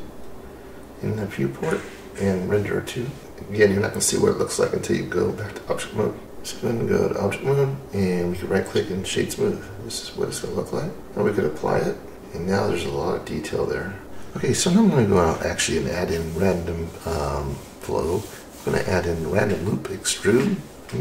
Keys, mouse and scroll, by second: 0.6 click, 6.2 click, 6.2-6.8 scroll down 1, 8.1 right click, 9.2-10.0 scroll down 3, 10.0-10.7 scroll up 1, 11.0 click, 12.0 click, 12.1 middle click.